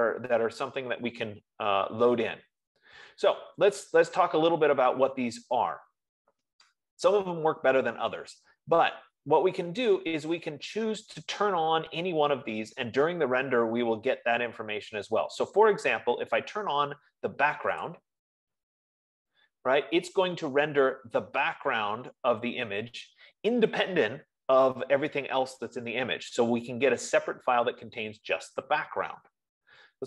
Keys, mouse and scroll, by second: 18.4-23.1 drag.